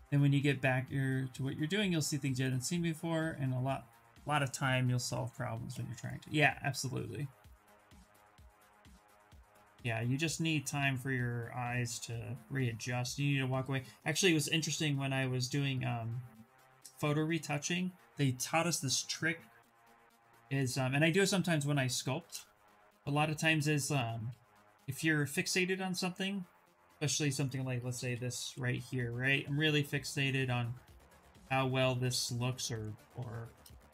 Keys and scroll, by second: 26.7-28.8 typing.